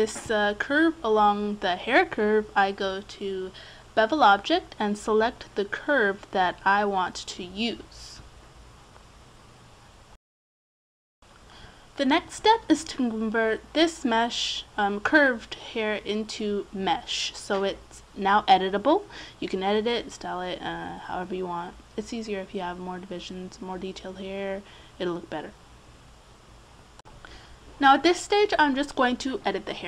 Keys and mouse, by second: 2.3-4.3 right drag, 5.8-6.9 middle drag, 8.7-14.1 middle drag, 20.4 Tab, 22.7 Tab, 24.1 middle click, 24.7 click, 26.4 click, 26.7 Tab, 27.2 right click, 27.8-29.1 right drag.